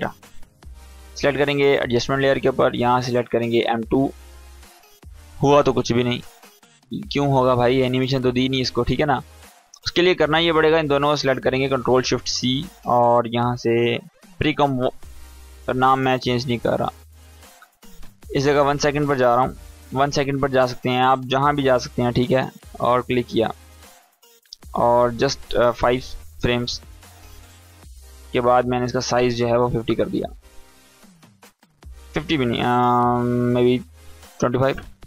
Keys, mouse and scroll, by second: 7.3-10.1 drag, 11.4 ctrl+shift+c, 15.1-18.3 drag, 19.4 ctrl+Left, 20.5 click, 21.6 s, 22.4-24.9 drag, 26.2 ctrl+Right, 28.4 click, 31.4 click.